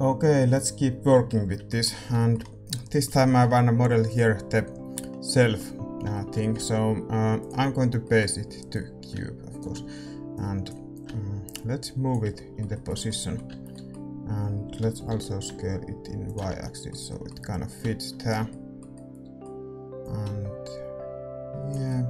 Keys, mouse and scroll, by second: 1.2-4.0 middle drag, 4.0-6.1 drag, 6.1-10.3 middle drag, 7.4 shift+a, 8.7-13.4 drag, 12.3-15.3 middle drag, 13.4 Tab, 14.7 s, 16.4 Tab, 17.7-21.8 drag, 20.0-21.6 middle drag, 21.8-22.0 middle drag.